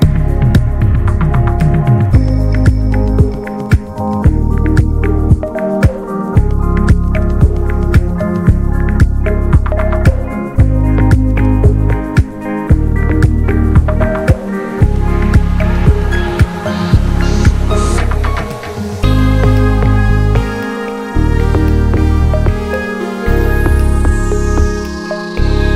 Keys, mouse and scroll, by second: 0.0 n, 0.1 drag, 0.4-1.2 middle drag, 1.2 ctrl+s, 1.4 middle click, 1.8 a, 2.1 x, 2.5-3.8 shift+middle drag, 3.8 click, 4.0 shift+a, 7.0 drag, 7.9 ctrl+z, 8.5 Delete, 9.1 shift+a, 11.3-14.7 drag, 14.9 click, 15.0-16.1 right drag, 16.1-18.6 drag, 19.0 click, 19.2 scroll down 1, 19.5 alt+middle click, 19.8 s, 21.3 s, 22.1 scroll down 2, 22.3 s, 23.7 s, 24.6 ctrl+a.